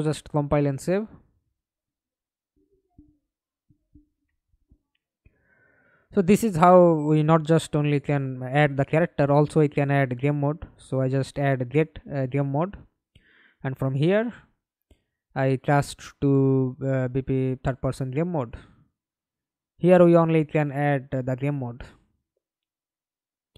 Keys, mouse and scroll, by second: 0.8 right click, 4.1 right click, 5.8 right click, 6.5 right click, 7.5-9.8 typing, 12.8-15.3 typing, 16.3 Return, 19.9 right click, 20.7 right click, 22.5-23.5 typing.